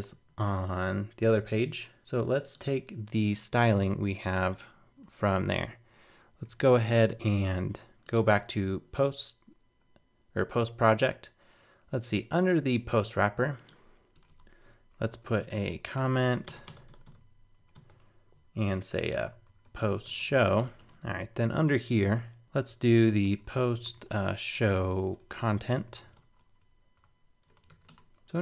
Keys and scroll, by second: 5.5 super+Tab, 28.2 super+z.